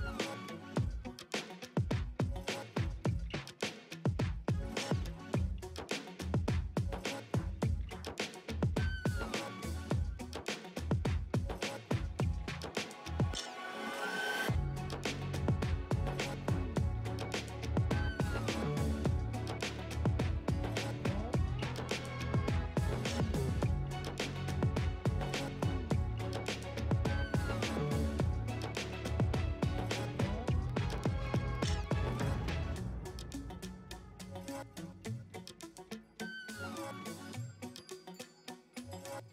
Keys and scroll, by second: 3.1 space, 6.4 ], 9.2 ], 11.9 space, 12.6 space, 15.3 space, 18.6 space, 18.9 space, 22.0-22.9 typing, 24.1 1.